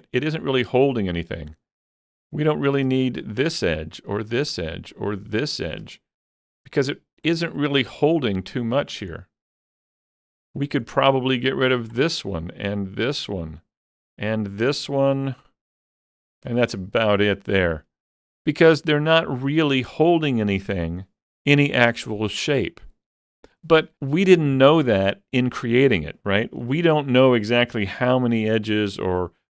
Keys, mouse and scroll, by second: 3.2 alt+shift+click, 4.2 alt+shift+click, 5.4 alt+shift+click, 6.5 middle click, 9.5 middle click, 11.8 alt+shift+click, 13.0 alt+shift+click, 14.4 alt+shift+click, 16.8 scroll down 2, 17.1 middle click, 18.8-20.4 scroll up 2.